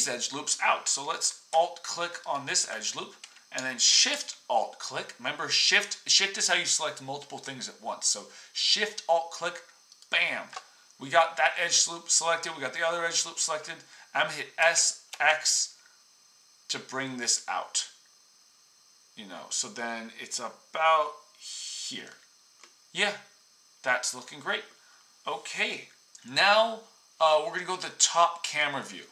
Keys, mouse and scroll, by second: 2.3-4.5 alt+drag, 4.5-12.4 shift+middle drag, 14.6-19.7 middle drag, 14.6 s.